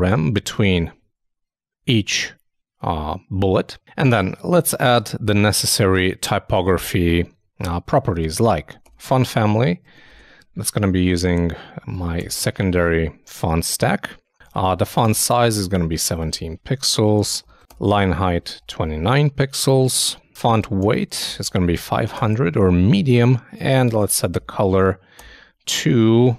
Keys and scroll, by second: 0.3 super+;, 0.4 super+s, 0.5 super+Tab.